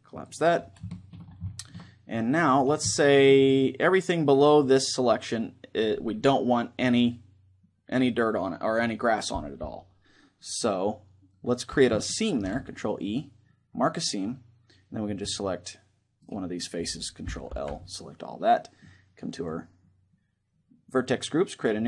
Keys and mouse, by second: 0.6-5.0 middle drag, 12.1 ctrl+e, 14.9-15.9 drag, 15.9-16.9 middle drag, 16.9 right click, 17.2 ctrl+l, 18.0-19.8 middle drag, 19.0-20.8 drag, 21.3-21.8 drag.